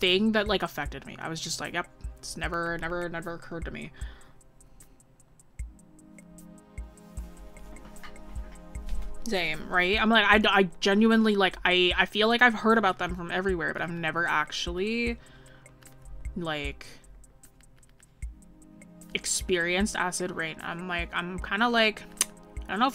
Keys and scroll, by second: 17.1 ctrl+z.